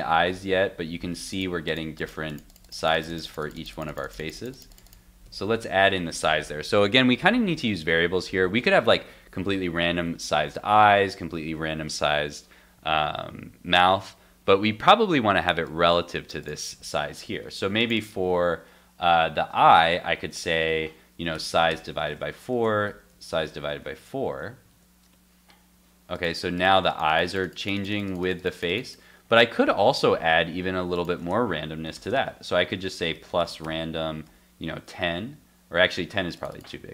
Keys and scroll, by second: 5.3 super+Tab, 22.1 super+s, 23.9 super+s, 24.3 super+Tab, 24.7 super+r, 29.8 super+Tab, 34.7 super+s.